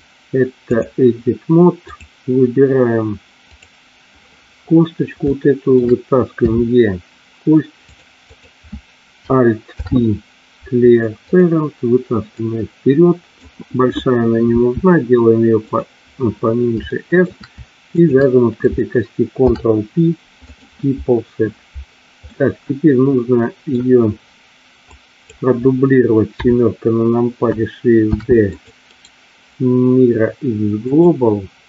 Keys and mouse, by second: 0.0-1.0 drag, 2.0 click, 5.4 shift+middle click, 6.5 e, 8.0 click, 8.2 click, 9.7 alt+p, 12.5 click, 14.6 s, 15.6 click, 17.0 shift+middle click, 19.5 ctrl+p, 22.3-23.9 middle drag, 25.1 click, 26.4 KP_7, 28.1 shift+d, 28.6 click, 29.0-31.3 right drag.